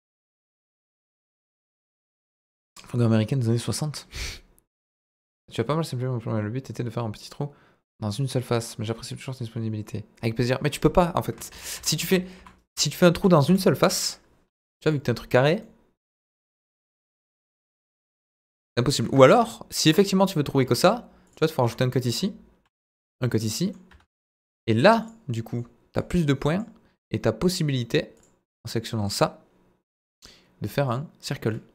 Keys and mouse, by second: 0.0 middle click, 11.5 ctrl+z, 11.7 ctrl+z, 12.0 ctrl+z, 12.3 ctrl+z, 12.7 ctrl+z, 13.1 ctrl+z, 13.4 ctrl+z, 15.6-18.5 middle drag, 20.6 ctrl+r, 21.6 Escape, 22.6 ctrl+r, 23.4 middle click, 23.8 Escape, 25.3 middle click, 26.0 click, 28.6 click, 30.8 click, 31.5 middle click.